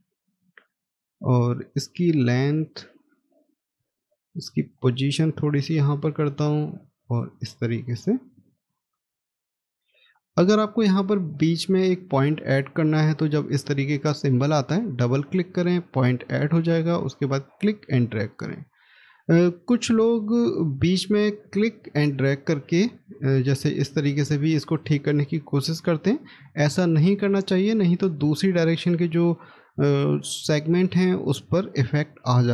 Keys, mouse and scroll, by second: 7.6 scroll down 1, 8.2 middle click, 8.4 scroll down 1, 9.1 middle click, 15.1 double click, 18.6 scroll down 1, 19.7 scroll up 1, 26.8 ctrl+z, 31.7 middle click.